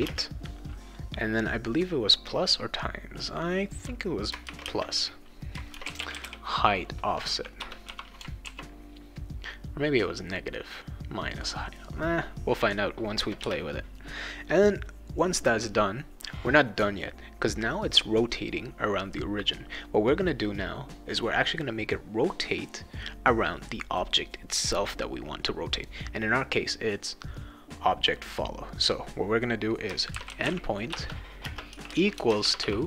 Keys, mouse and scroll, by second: 4.4-6.7 typing, 7.6 Return, 7.8 ;, 8.4 ctrl+s, 13.2 Return, 28.3-29.9 scroll down 2, 29.9-32.8 typing.